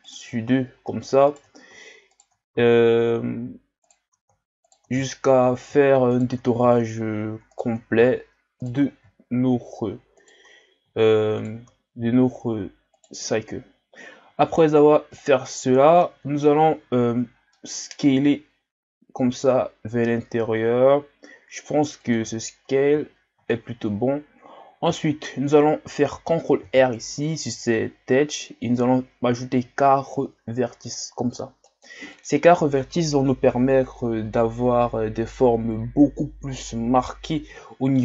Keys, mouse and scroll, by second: 1.3-2.9 shift+right drag, 2.9 shift+scroll up 1, 3.8-5.1 shift+right drag, 5.1 shift+scroll up 1, 6.1 shift+right click, 7.5-11.8 shift+right drag, 14.8 scroll down 2, 15.1-16.5 middle drag, 16.5-17.1 scroll up 1, 17.1-17.5 scroll up 1, 17.5 middle click, 18.0 s, 22.4-23.6 shift+scroll down 2, 24.5-25.0 ctrl+scroll up 1, 25.0 shift+scroll down 2, 25.2 scroll up 2, 26.6 ctrl+r, 32.1 click.